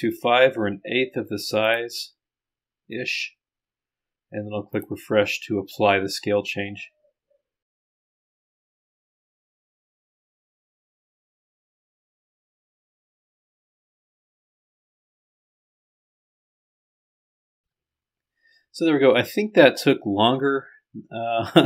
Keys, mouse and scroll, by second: 1.7 click, 7.8 click, 9.3 click, 9.5 scroll down 1, 10.9 click, 11.3 scroll up 1, 11.6 click, 11.8 scroll down 1, 12.3-12.7 scroll down 2, 12.7 scroll up 1, 13.2-14.5 drag.